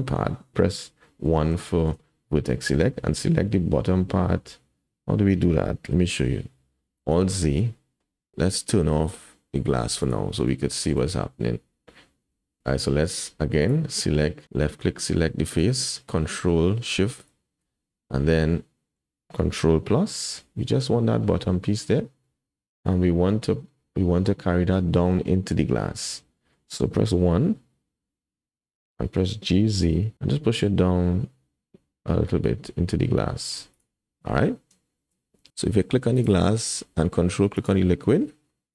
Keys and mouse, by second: 0.5 KP_1, 1.2 1, 1.7 shift+click, 5.8 click, 7.1 alt+z, 7.4 shift+click, 7.8 click, 10.7 shift+click, 12.2 3, 14.0 click, 18.5 click, 20.1 ctrl+KP_Add, 21.5-22.9 drag, 24.1 middle click, 26.3 middle click, 27.2 KP_1, 29.4 g, 35.0 shift+click, 35.4 Tab, 35.5 Tab, 35.5 alt+a, 37.6 ctrl+drag.